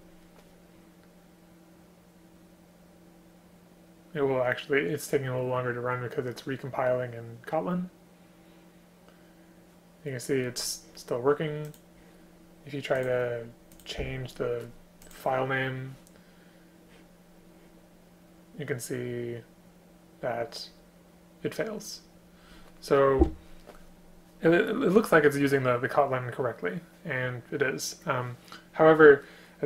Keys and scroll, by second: 23.2 BackSpace.